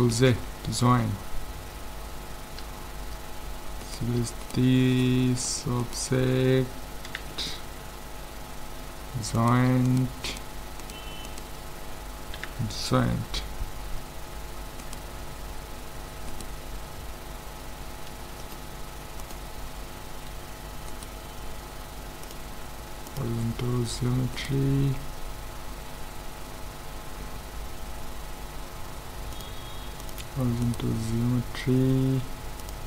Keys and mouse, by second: 0.2 ctrl+j, 3.8-7.7 right drag, 7.1 ctrl+j, 9.4-13.0 right drag, 12.4 ctrl+j, 13.9 a, 14.9-18.0 right drag, 18.4-20.2 drag, 20.9-22.7 right drag, 22.2-24.0 drag, 24.4-26.2 right drag, 29.3-31.2 drag, 30.7-32.4 right drag, 32.6-32.8 drag.